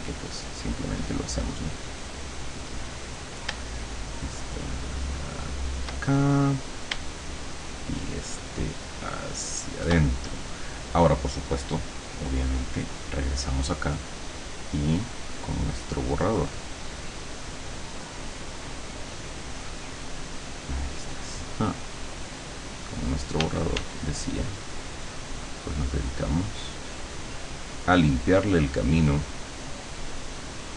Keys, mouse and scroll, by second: 4.0-6.0 shift+drag, 7.9-10.0 shift+drag, 13.2 click, 13.8 click, 19.4 scroll down 2, 23.5 d, 24.4-30.7 drag.